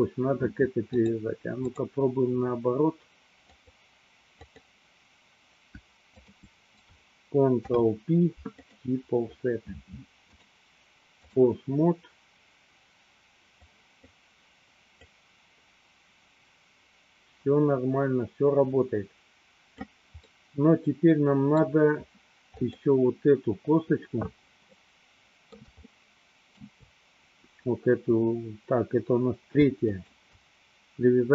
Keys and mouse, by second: 0.9-2.0 drag, 3.6 click, 4.6 click, 6.3 shift+click, 7.6 ctrl+p, 10.5 click, 13.8 click, 15.1-20.0 drag, 20.5-21.8 middle drag, 22.9 click, 24.8-26.9 middle drag, 29.9 shift+click.